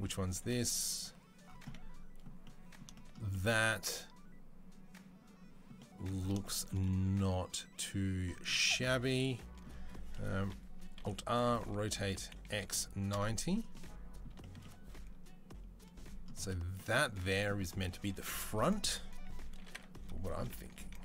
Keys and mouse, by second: 0.4-0.9 drag, 0.9-1.5 middle drag, 1.5-2.7 right drag, 2.7-10.6 shift+middle drag, 10.8 alt+r, 10.9-21.0 middle drag, 19.4 r.